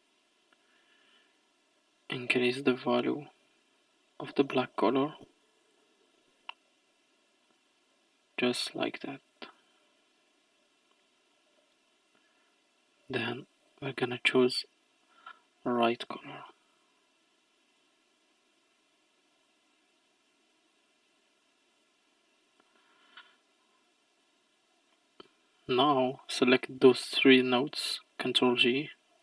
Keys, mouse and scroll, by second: 1.1-4.1 drag, 7.5-9.9 drag, 9.9-11.6 scroll down 8, 11.6 middle click, 12.3-13.2 scroll up 5, 13.6 click, 23.3-24.6 scroll down 6, 24.9-25.8 middle drag, 25.8 drag, 28.4 ctrl+j.